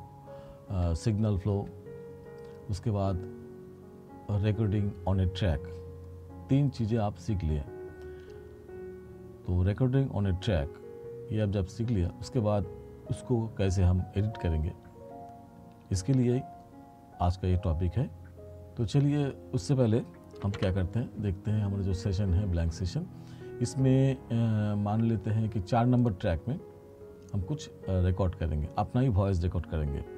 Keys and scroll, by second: 20.6 ctrl+=.